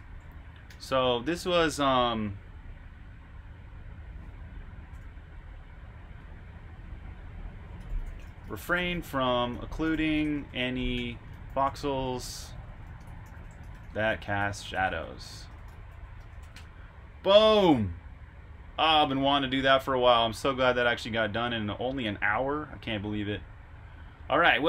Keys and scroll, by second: 0.6 typing, 7.4-11.4 typing, 16.6 typing.